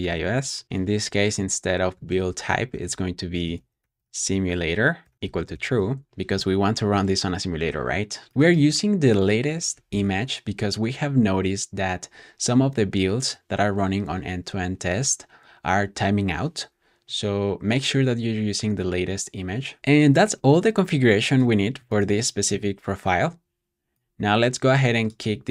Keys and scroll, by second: 0.0-6.2 typing.